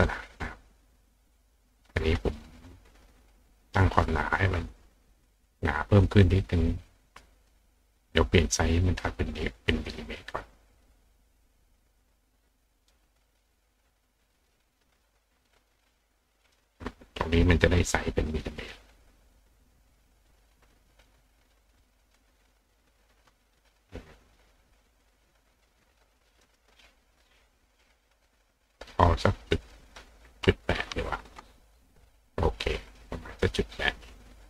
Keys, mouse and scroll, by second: 7.3 click, 8.8 click, 9.9 click, 10.1 click, 12.8 click, 14.4 click, 15.4 click, 16.4 click, 18.6 click, 20.9 click, 22.0 click, 22.3 click, 24.9 click, 26.4 click, 27.7 click, 28.5-29.7 drag.